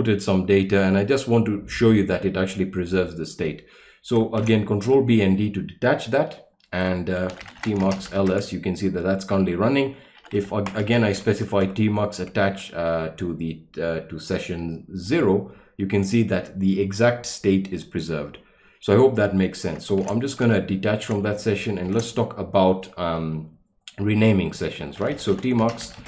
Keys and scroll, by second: 4.4 ctrl+b, 4.8 d, 7.1-8.7 typing, 9.9-11.6 typing, 15.1 Return, 20.0 ctrl+b, 20.4 d, 21.8 ctrl+l, 24.7-26.0 typing.